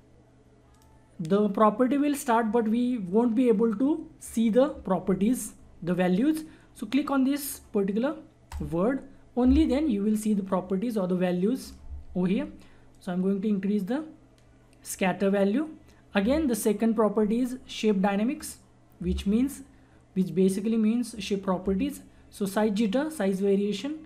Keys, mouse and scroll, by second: 8.4 click, 12.9 click, 12.9-17.5 drag, 18.4 click, 23.0 click.